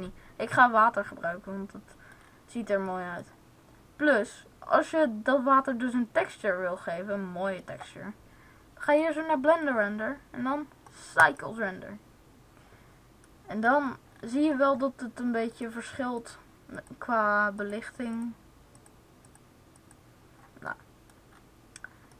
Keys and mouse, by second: 2.6 middle click, 8.7-11.2 drag, 20.7 click.